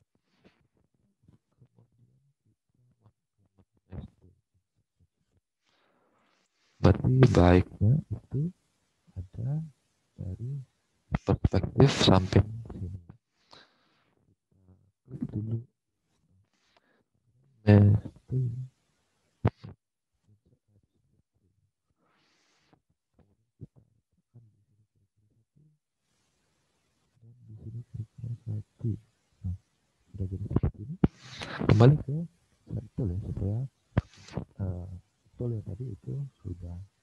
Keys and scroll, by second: 4.8 alt+Tab, 7.2 space.